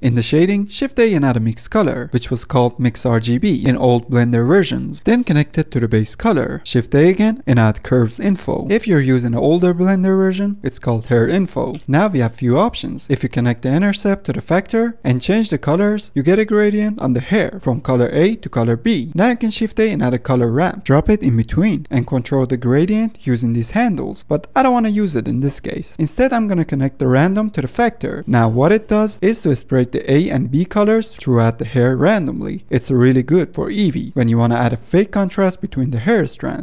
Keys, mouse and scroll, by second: 0.1 shift+a, 4.1-4.8 middle drag, 4.8-5.7 scroll up 2, 5.7 click, 6.7 click, 6.8 scroll up 2, 6.9 middle click, 6.9 scroll down 2, 7.0 middle click, 7.0 scroll up 1, 7.2 middle drag, 7.4 shift+a, 9.5 Down, 10.4 middle click, 10.8 click, 12.6 click, 14.5 middle click, 14.8 click, 19.3 middle click, 19.7 shift+a, 22.6-23.0 middle drag, 23.0-24.2 drag, 24.2 shift+middle click, 24.4-25.4 drag, 26.0-26.9 drag, 28.0 middle drag, 28.2 scroll down 1, 28.8 middle click, 29.3-29.8 scroll up 6, 30.8-36.6 drag.